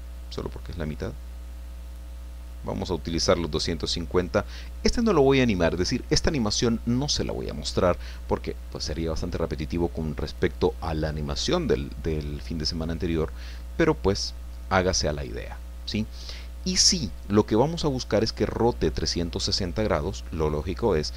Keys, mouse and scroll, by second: 0.6-2.6 drag, 12.7-14.5 middle drag, 14.5-15.7 middle drag.